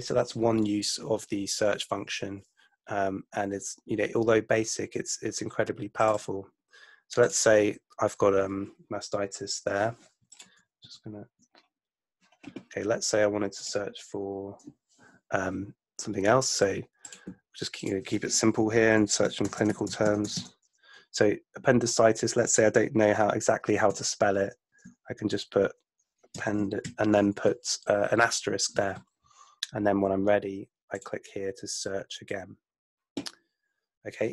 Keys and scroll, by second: 10.9 ctrl+Right, 19.0-20.8 typing, 23.6 BackSpace, 26.3 |, 26.8 shift+8.